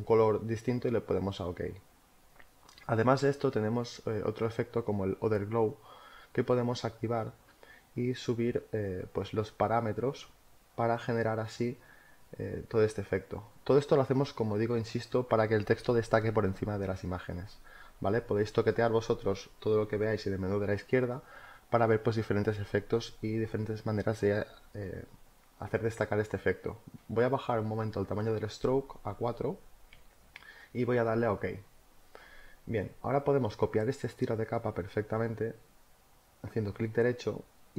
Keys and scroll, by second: 29.1 4.